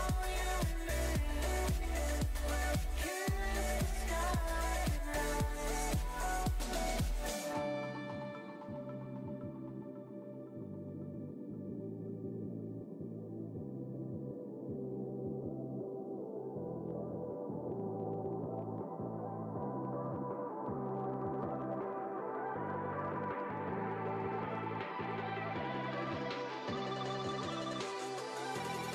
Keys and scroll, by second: 8.9 shift+Down, 9.5 shift+Right.